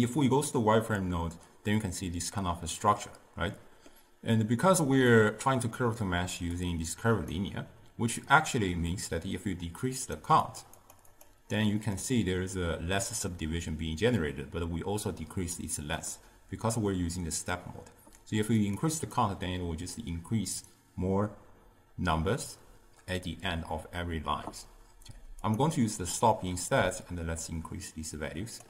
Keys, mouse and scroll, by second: 3.6-4.5 middle drag, 4.5 click, 6.7-9.8 drag, 10.0-15.0 drag, 18.7-22.1 drag, 25.5 click, 27.0-28.6 shift+drag.